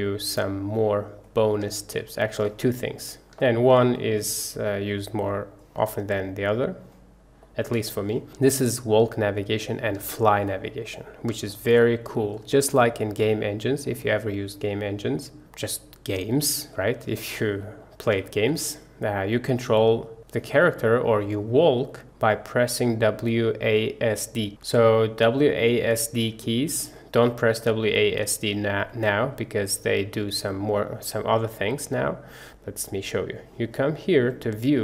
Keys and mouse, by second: 1.8 shift+click, 2.2 shift+middle click, 3.2 middle click, 3.5 shift+middle click, 4.2-5.7 middle drag, 7.5 middle click, 7.9 shift+middle click, 8.2-9.7 middle drag, 10.2 shift+middle click, 10.7 middle click, 11.6 shift+middle click, 11.9-12.4 middle drag, 12.6 shift+middle click, 14.2-16.2 middle drag, 16.8 middle click, 17.2 shift+middle click, 17.7 middle click, 18.3 shift+middle click, 18.6 middle click, 20.0 middle click, 20.8-21.2 middle drag, 21.7 middle drag, 22.2 middle click, 32.0 middle click, 32.5 click, 34.5-34.8 drag.